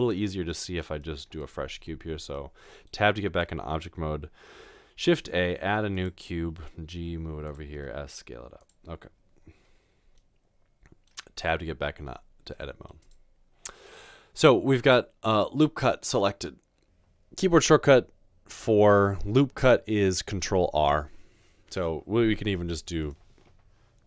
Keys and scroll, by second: 0.0 typing, 6.9-7.7 typing, 11.5 Tab.